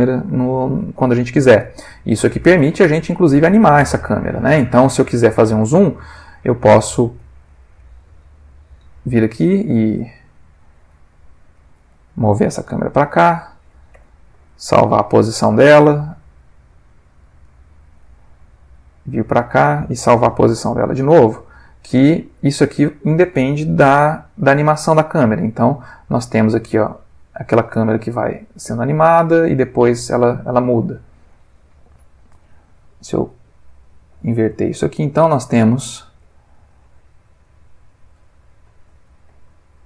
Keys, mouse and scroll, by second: 2.2 click, 4.4-5.8 drag, 6.7-7.3 ctrl+middle drag, 9.8 click, 11.1-11.7 ctrl+middle drag, 12.7 g, 13.4 click, 13.9 i, 14.8 click, 15.8-18.1 drag, 18.4 g, 19.5 click, 20.0 i, 20.8 click, 22.3-23.1 drag, 24.7 click, 26.2-31.2 drag, 32.2 click, 32.4 g, 33.5 click, 35.0-39.2 drag.